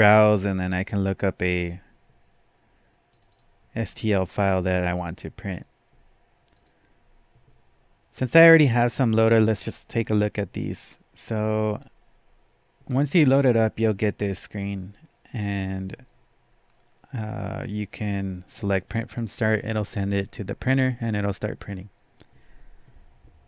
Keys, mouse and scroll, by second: 3.1 click, 3.3 double click, 5.0 click, 6.6 click, 8.1 click.